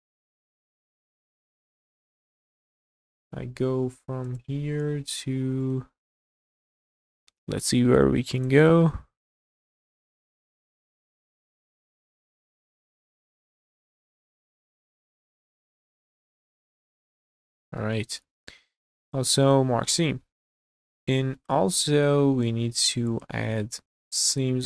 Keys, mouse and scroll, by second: 0.3-1.1 scroll down 6, 1.4 middle click, 1.9 scroll down 2, 2.3 shift+middle click, 2.7 middle click, 3.1 scroll down 1, 4.2 click, 5.6 ctrl+click, 6.1 middle click, 8.4 ctrl+click, 8.8 scroll down 1, 8.8-9.9 middle drag, 10.2 ctrl+z, 11.0 ctrl+click, 11.6 middle click, 13.8 ctrl+click, 14.4-14.9 scroll up 2, 15.0 shift+middle click, 15.5 middle click, 16.3 ctrl+click, 17.2 ctrl+click, 17.8 middle click, 18.5 q, 19.4 click, 19.7-20.6 scroll down 5, 20.6-24.6 middle drag, 23.8-24.2 scroll down 2.